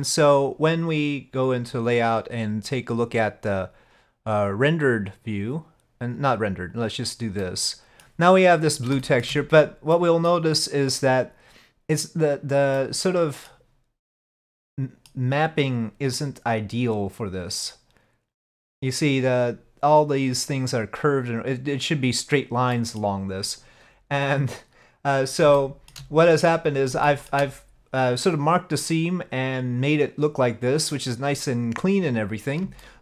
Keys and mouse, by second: 24.3 click, 25.6 shift+middle click, 27.1 shift+middle click, 32.9 shift+middle click.